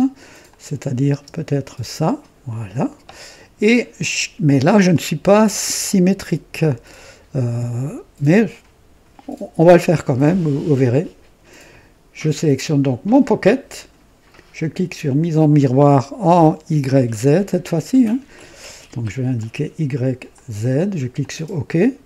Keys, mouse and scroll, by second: 0.4 click, 1.0 space, 4.8-5.7 drag, 18.2 click, 19.3 click, 20.3 click, 21.1 click.